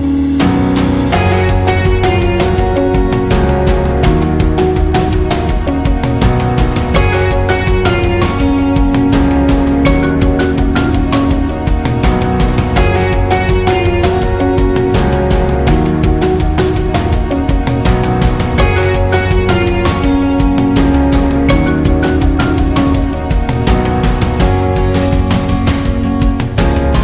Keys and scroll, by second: 2.0 ctrl+z, 12.2-12.9 space.